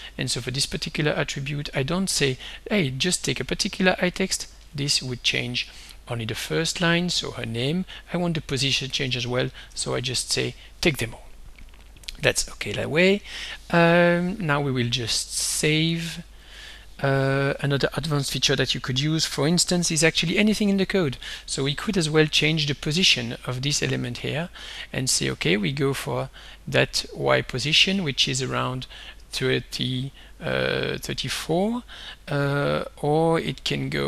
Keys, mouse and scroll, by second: 0.4 click, 1.8 click, 2.4 click, 3.1 click, 4.7 1, 6.5-7.6 drag, 9.1 BackSpace, 12.2 click, 16.4 ctrl+s, 19.8 click, 22.6-24.5 drag, 24.9-28.9 drag, 31.2 click, 32.5-34.0 drag.